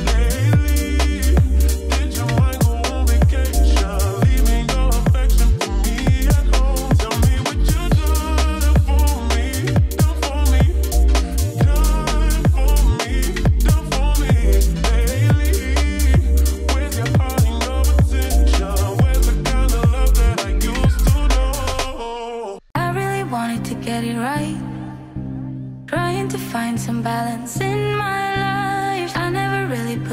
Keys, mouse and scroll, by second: 8.3-9.0 typing, 10.1-15.7 drag, 21.7 ctrl+d, 23.5 click, 29.8 t.